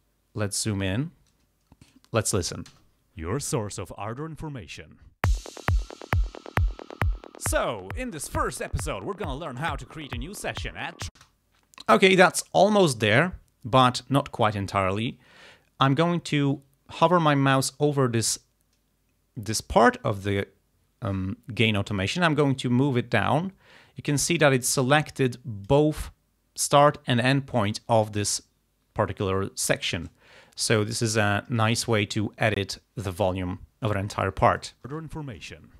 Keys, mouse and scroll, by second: 1.9 click, 2.8 space, 11.2 space, 14.8-15.4 ctrl+scroll down 4, 16.3 ctrl+scroll down 2, 20.3-26.0 drag, 31.0 ctrl+scroll up 2, 33.2 click, 34.6 click, 34.9 space.